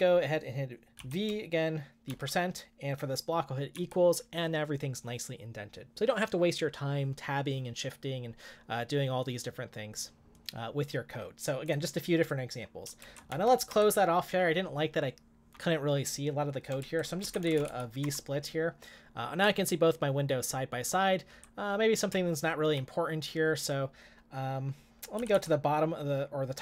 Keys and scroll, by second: 1.0-2.6 typing, 3.7 typing, 13.1-13.8 typing, 17.0-18.1 typing, 19.4-22.1 k, 22.1 j, 22.6 j, 22.7 j, 24.9-25.8 typing.